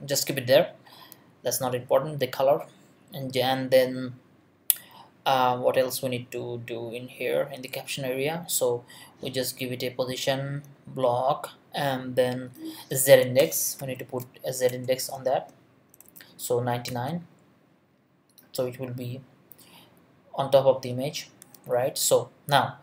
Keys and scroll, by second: 13.4 Return, 13.8 z, 14.7 Return, 15.3 space, 15.9 9, 16.9 ;.